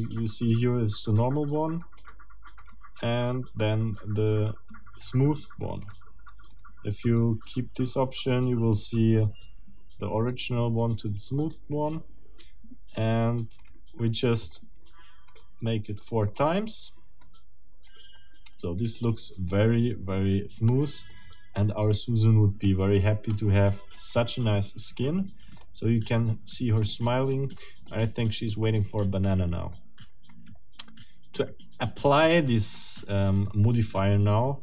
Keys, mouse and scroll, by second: 2.0 click, 2.6 click, 3.0 click, 5.8 click, 6.5 click, 7.1 click, 11.9 click, 13.6 click, 14.4 click, 15.3 click, 16.2-17.4 middle drag, 18.2-19.8 middle drag, 21.2-21.6 scroll up 2, 21.8-23.5 middle drag, 23.5-23.9 scroll down 3, 23.9-25.8 middle drag, 26.9 click, 27.9-29.9 drag, 32.7 click.